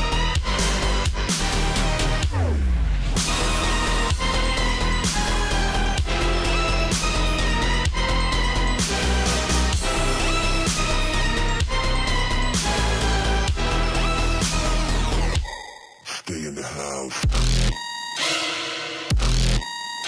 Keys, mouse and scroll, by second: 0.3 alt+scroll up 1, 0.8-4.4 drag, 4.6 alt+scroll down 1, 4.8 alt+scroll up 1, 5.3-6.7 drag, 6.7 click, 8.1 ctrl+z, 8.7-10.7 drag, 11.0 alt+scroll down 1, 11.2-11.5 alt+scroll up 1, 13.0-13.3 alt+scroll up 1, 13.4 space, 13.6 click, 13.7 space, 14.8 alt+scroll up 1, 16.5 click, 17.6 Down, 19.6 click.